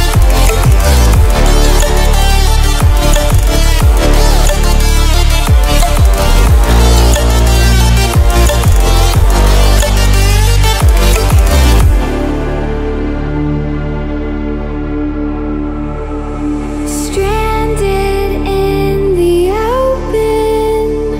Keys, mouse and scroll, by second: 2.4 click, 7.0 click, 9.9-21.1 drag.